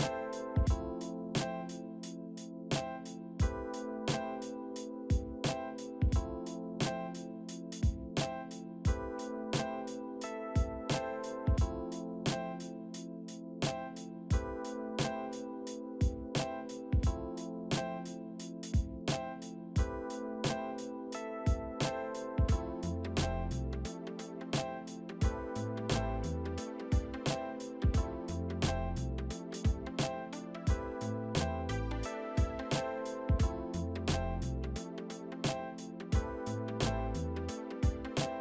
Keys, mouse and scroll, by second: 0.8 middle click, 4.3 F3, 4.8 F3, 5.6 middle click, 8.7-9.6 typing, 10.0 middle click, 16.7 middle click, 20.7 middle click, 21.7 F3, 32.3 Escape, 32.6 Escape, 35.8 alt+w, 36.7 middle click, 36.9 z, 37.2 middle click, 37.7 middle click, 38.1-38.4 scroll up 1.